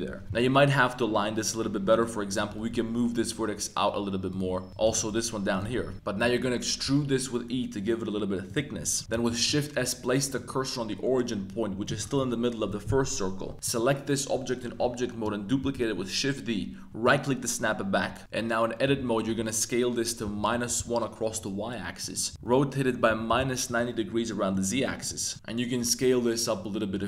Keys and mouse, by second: 0.2 Tab, 0.3 Tab, 1.9 click, 2.3 g, 4.3 shift+click, 4.8 g, 4.9 y, 5.5 shift+click, 5.6 Tab, 5.9 middle click, 5.9 a, 6.8 e, 8.5 click, 8.7 Tab, 8.9 middle click, 9.1 shift+s, 10.3 middle click, 10.4-11.0 drag, 10.4-11.0 right drag, 13.4 Tab, 13.5 x, 13.6 click, 15.6 shift+d, 17.0 click, 18.2-20.3 typing, 20.5 Return, 20.7 Return, 22.0 click, 22.3-23.4 typing, 23.6 click, 24.2 middle click, 24.8 middle click, 25.1 Tab, 25.3 middle click, 25.3 z, 25.8 s.